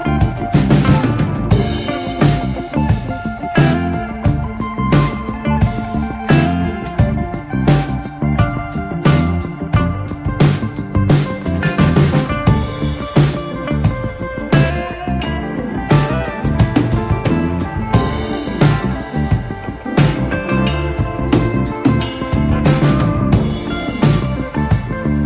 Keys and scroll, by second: 0.9 space, 4.2 space, 5.6 space, 7.0 x, 8.4 Escape, 9.4 x, 10.2 x, 10.8 space, 14.1 space, 14.3 r, 18.6 Escape, 18.8 space, 20.1 x, 22.0 x, 22.5 space, 22.7 r, 23.0 space, 24.1 x.